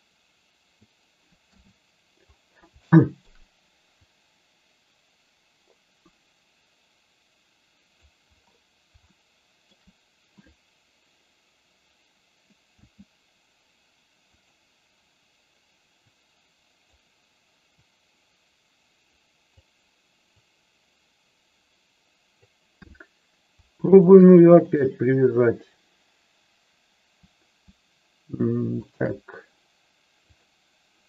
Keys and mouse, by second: 1.4 KP_3, 2.8 shift+middle click, 4.0-8.0 drag, 9.0 shift+middle click, 12.7 s, 14.3 click, 15.9-16.9 drag, 17.6-19.5 drag, 20.4-22.4 drag, 23.8 shift+click, 28.9 shift+click, 30.3 click.